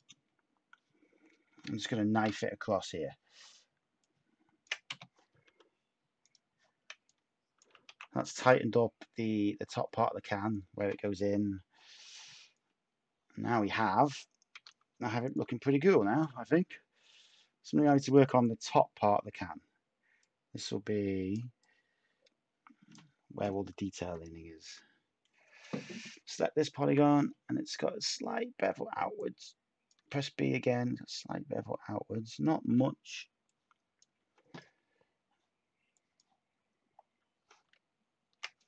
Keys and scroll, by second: 2.1 k, 5.4 Tab, 7.8 a, 9.5 Tab, 14.5 Tab, 26.8 b.